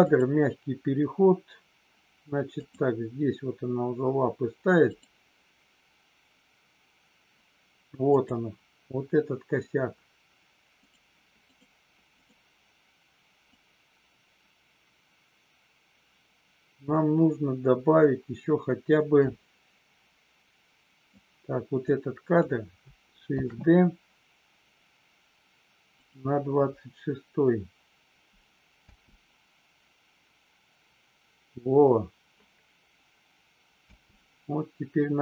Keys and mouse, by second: 0.1 click, 2.5 click, 4.8 click, 8.1 click, 10.8 click, 11.4 click, 12.2 click, 13.5-21.2 drag, 21.8-22.4 drag, 23.3 shift+d, 25.9 click, 28.8 space, 33.8 space.